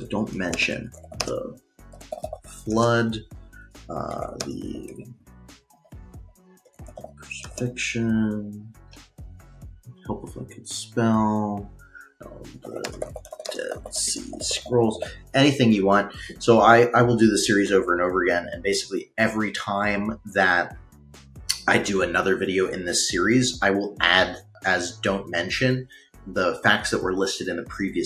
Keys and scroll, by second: 0.4-7.2 typing, 10.2-10.9 typing, 12.1-15.6 typing.